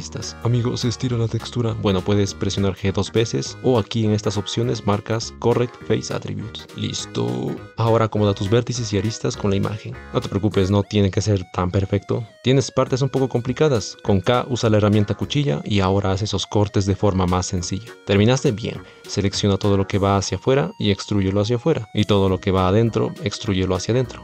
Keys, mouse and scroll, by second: 1.5 g, 4.0-6.5 drag, 6.7 g, 7.8 g, 8.3 g, 8.9 g, 9.0 ctrl+r, 9.4 shift+middle click, 9.9 ctrl+r, 10.0-12.9 typing, 10.4 shift+middle click, 10.5 click, 11.0 shift+middle click, 11.8 shift+middle click, 17.6 shift+middle click, 19.1 c, 20.5 c, 21.0 e, 22.5 shift+middle click, 22.8 shift+middle click, 23.0 shift+middle click, 24.0 e.